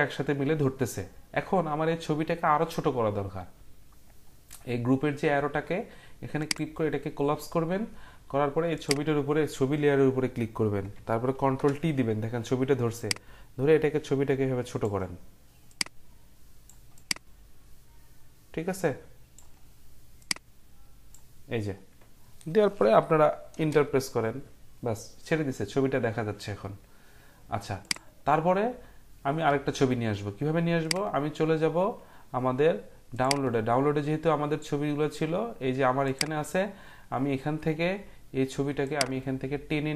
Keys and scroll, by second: 11.5 ctrl+t, 23.5 Return.